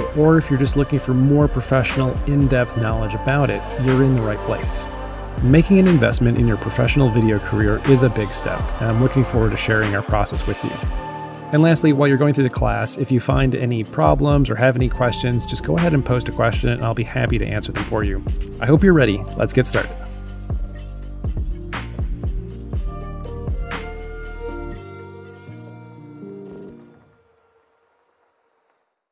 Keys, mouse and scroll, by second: 1.3-2.8 drag, 3.2 right drag, 3.7 right drag, 4.1 right click, 4.4 right click, 4.9 right click, 5.2 1, 7.4 click, 7.5 click.